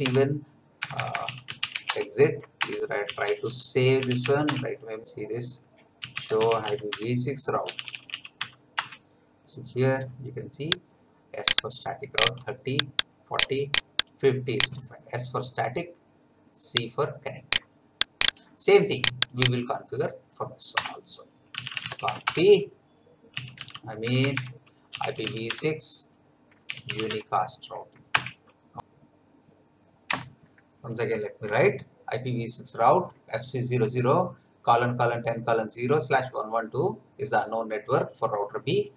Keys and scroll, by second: 0.0-4.7 typing, 6.7-8.6 typing, 6.8 Tab, 8.7 Return, 20.7 Return, 21.3-27.4 typing, 28.2 Return, 30.1 F9.